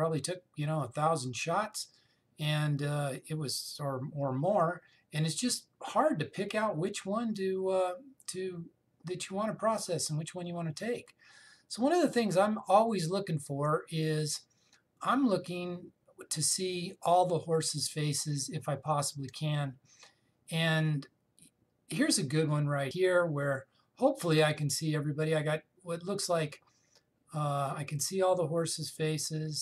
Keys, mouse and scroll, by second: 3.6 scroll down 1, 6.3-8.2 scroll down 1, 11.9 scroll up 1, 18.5 scroll up 1, 22.9 click.